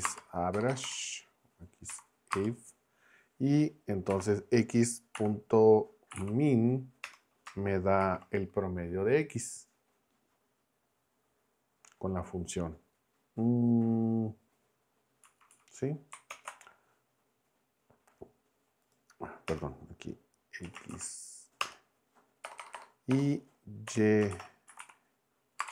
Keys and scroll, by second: 0.0-0.5 typing, 1.9 =, 2.3 space, 4.1 x, 5.1-6.7 typing, 7.0 Return, 8.0 shift+9, 15.2 Right, 16.3 ctrl+Return, 19.5 Return, 20.6 x, 20.9 shift+a, 21.6 Return, 22.4-25.7 typing.